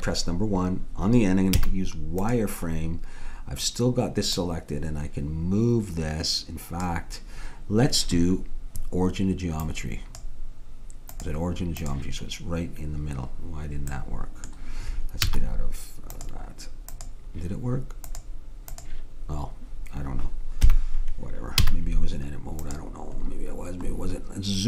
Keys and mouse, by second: 0.5-1.8 middle drag, 1.7 z, 4.4-6.1 drag, 9.7-13.0 drag, 14.0 middle click, 15.3 z, 17.0-19.8 drag, 20.6 KP_1, 21.6 z.